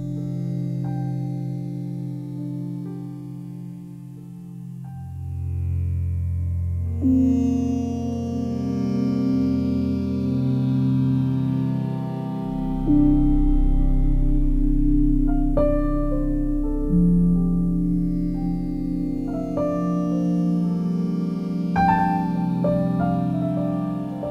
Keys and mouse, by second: 0.5 alt+shift+click, 2.4 3, 3.1 alt+shift+click, 5.6 click, 6.6 g, 6.8 y, 7.7 click, 9.6-12.1 alt+drag, 12.1-12.7 typing, 13.5-14.5 drag, 15.1 typing, 17.1 click, 18.7 typing, 20.1-22.0 drag, 22.3 click, 22.4 typing, 22.8-24.3 alt+drag.